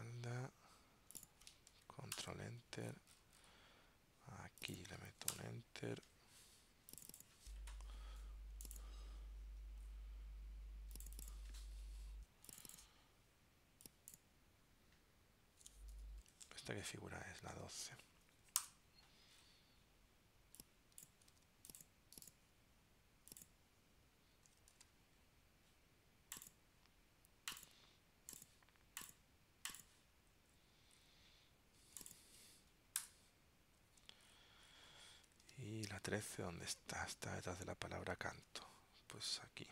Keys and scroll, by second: 2.3 super+Return, 16.5 super+Tab, 21.4 super+x, 24.8 super+v, 35.5 super+Tab, 38.5 super+Tab, 39.3 super+Right.